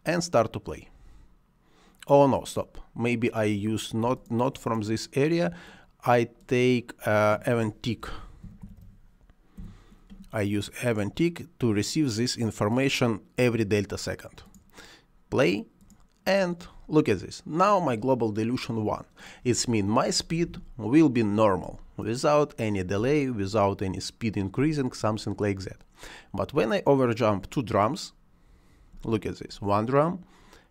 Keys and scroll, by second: 7.9 t, 8.5 c, 8.6 j, 9.4 BackSpace, 19.5 space, 24.5 space, 28.8 space.